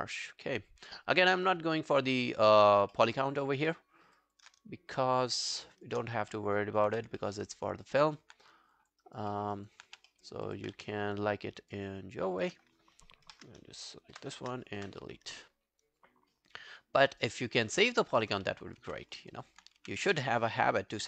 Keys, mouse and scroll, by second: 1.5 scroll down 2, 1.8 alt+click, 2.2 alt+middle click, 2.4-3.0 alt+scroll down 8, 3.0 alt+middle click, 3.4 alt+click, 3.7 alt+middle click, 4.0 alt+scroll down 1, 4.2 alt+click, 5.2 shift+click, 6.1-6.7 scroll up 4, 6.4 alt+middle click, 6.9 e, 7.2 alt+middle click, 7.5 alt+right click, 7.7 alt+click, 8.8 alt+click, 9.1 alt+right click, 9.4 alt+middle click, 9.6 alt+right click, 9.9 q, 10.1 alt+middle click, 10.5 alt+click, 10.8 q, 11.0 right click, 13.3 ctrl+F11, 14.2 shift+., 14.8 shift+., 16.6 right click, 17.8 scroll down 4, 18.1 alt+click, 18.8 r, 19.1 scroll down 2, 19.3 alt+click, 19.8 e, 20.4 alt+right click, 20.7 alt+click.